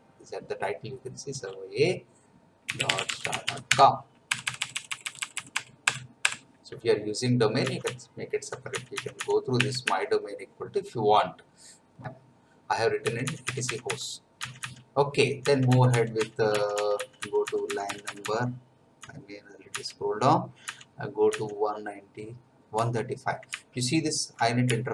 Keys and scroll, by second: 2.5-4.2 typing, 4.3 Delete, 7.6 Down, 13.0 Down, 13.5 Down, 14.4 Down, 15.4 Down, 16.1 Down, 17.8 Down, 22.7 Down, 23.5 Left, 24.6 Right.